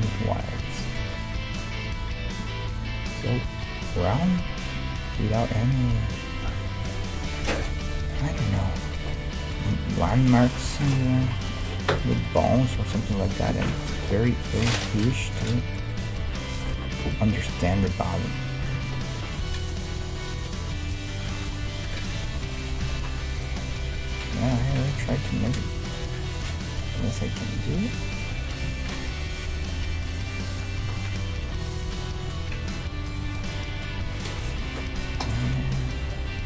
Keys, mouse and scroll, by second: 0.0-2.6 drag, 0.0 g, 1.0 g, 4.8 g, 5.4-7.2 middle drag, 5.7 g, 6.4 g, 7.3-14.1 middle drag, 7.7-9.5 right drag, 10.0 g, 11.0 right click, 11.2 g, 14.1-15.7 right drag, 14.4 e, 15.7-19.6 middle drag, 15.8 right click, 16.2 g, 17.8 ctrl+Tab, 18.8 ctrl+Tab, 19.8-24.0 right drag, 20.1-21.8 middle drag, 21.3 f, 22.5 f, 22.6-31.3 middle drag, 22.8 a, 28.6 KP_3, 30.2-33.6 right drag, 31.8 g, 32.7 e, 36.0 e.